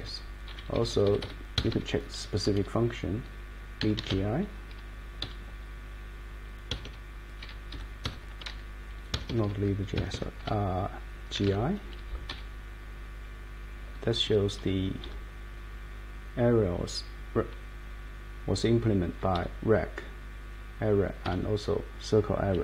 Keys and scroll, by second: 0.5 Down, 0.7 Left, 1.5 Escape, 3.5-4.6 typing, 5.2 Page_Down, 6.7 Escape, 6.8 Escape, 7.4 Page_Down, 7.7 Page_Up, 8.0 Escape, 9.1 Escape, 9.3 Escape, 9.4 Escape, 9.9 Escape, 11.1-11.9 typing, 12.3 Down, 13.8 Down, 14.2 Up, 14.6 Down, 15.0 Up, 19.0 Down, 19.3 Up, 21.3 Down.